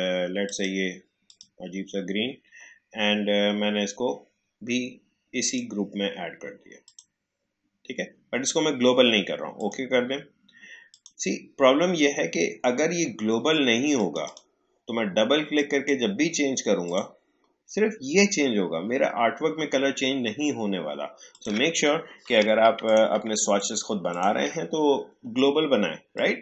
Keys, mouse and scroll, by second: 5.4 click, 9.5 click, 13.9 click, 21.3 click, 22.3 Delete, 22.8 click, 23.1 Delete, 23.5 click, 23.7 Delete, 24.0 click, 24.1 click, 24.2 Delete, 26.1-26.4 drag.